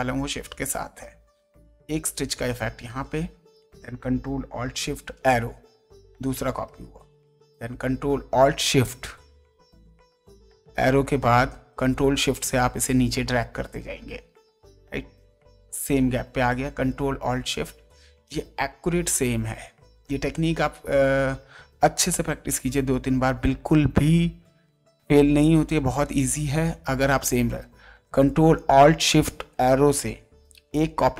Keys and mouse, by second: 1.6 shift+click, 7.6 ctrl+shift+Down, 15.8 ctrl+shift+Up, 20.5 ctrl+space, 21.0 ctrl+click, 22.3 ctrl+space, 23.9 ctrl+space, 23.9 click, 26.2 ctrl+shift+Down.